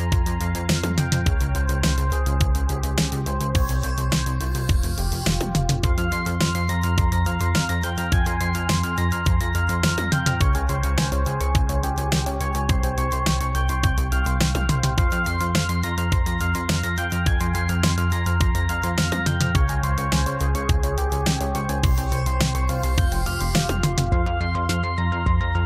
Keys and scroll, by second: 2.8 ctrl+c, 2.9 ctrl+v, 11.3 ctrl+z.